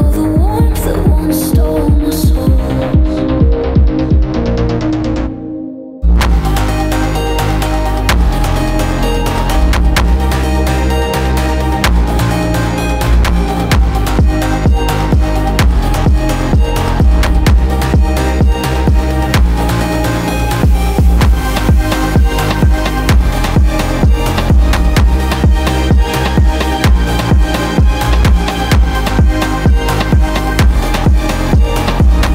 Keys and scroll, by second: 3.6 ctrl+z, 8.2 alt+Left, 11.1 alt+Left, 16.3 alt+Left, 18.8 ctrl+z.